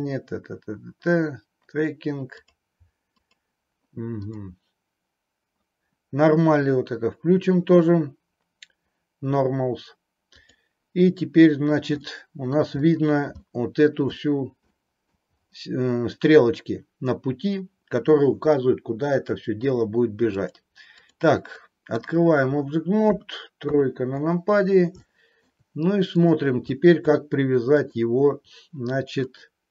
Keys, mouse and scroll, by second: 10.3-11.7 drag, 12.1 middle click, 13.4 middle click, 14.7 middle click, 20.3-21.2 drag, 21.4-21.9 middle drag, 25.1-25.4 middle drag, 26.2 click, 27.8 click, 29.3 click.